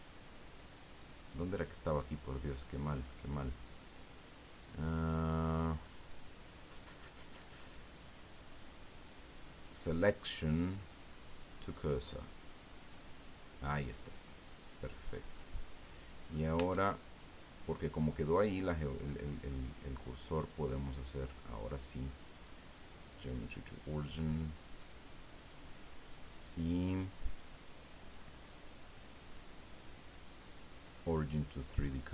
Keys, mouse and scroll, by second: 12.9 click, 13.8-14.1 scroll down 2, 14.2-16.5 middle drag, 16.5 Tab, 17.7-19.6 middle drag, 20.4 click, 23.2 click, 24.7 click, 25.3 click, 31.6 click.